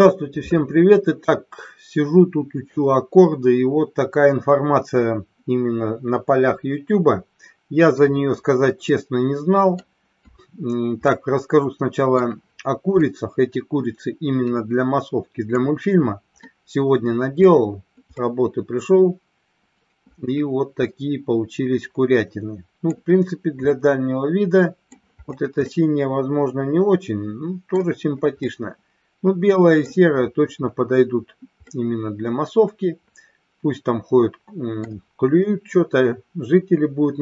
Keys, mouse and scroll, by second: 8.9-9.9 middle drag, 11.1-12.1 middle drag, 13.0-15.5 middle drag, 16.4-17.4 middle drag, 18.1-22.9 middle drag, 23.6-25.0 middle drag, 25.6-27.8 middle drag, 28.5-29.8 middle drag, 31.6-34.9 middle drag.